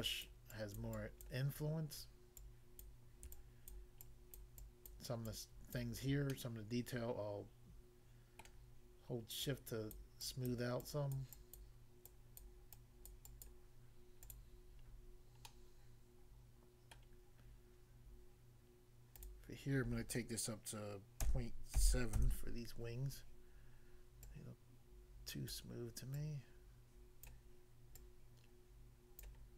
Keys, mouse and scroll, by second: 0.3 click, 0.9 click, 1.3 click, 2.4 click, 2.8 click, 4.0 shift+click, 4.6 shift+click, 5.3 shift+click, 6.3 middle click, 8.4 middle click, 9.5 click, 9.9 click, 10.2 click, 10.5 click, 11.2 click, 11.6 click, 12.4 click, 13.1 click, 13.5 click, 14.9 scroll down 1, 15.5 middle click, 17.0 middle click, 19.1 click, 19.3 click, 21.2 ., 21.8 7, 22.1 Return, 24.3 click, 25.5 click, 26.1 click, 27.0 click, 27.3 click, 27.9 click, 29.2 click.